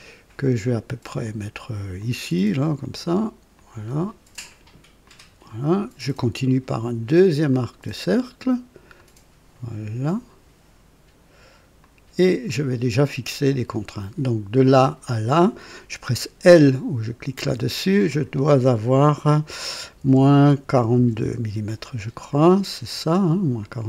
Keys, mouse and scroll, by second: 2.0 click, 3.5 click, 5.0 click, 7.5 click, 8.9 click, 11.8 click, 12.5 right click, 13.9 click, 17.4 l, 20.0 KP_Subtract, 20.7 KP_4, 20.9 KP_2, 21.2 KP_Enter, 22.9 click, 23.1 typing, 23.6 click.